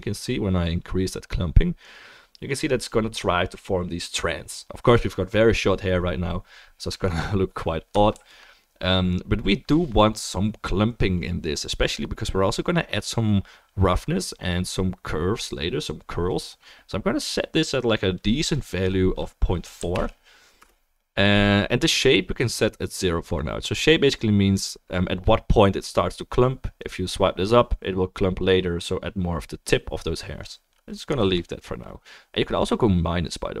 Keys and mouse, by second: 7.9-33.6 ctrl+drag, 8.3 ctrl+z, 27.8-33.6 middle drag, 27.8-33.6 right drag.